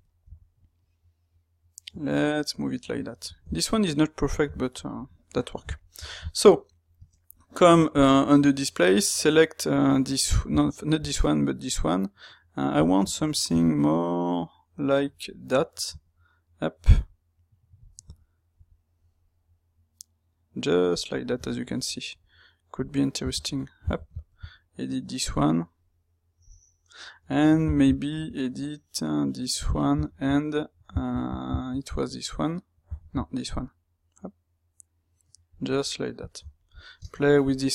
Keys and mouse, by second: 2.9-3.3 middle drag, 3.6-4.3 middle drag, 4.5-37.7 shift+middle drag.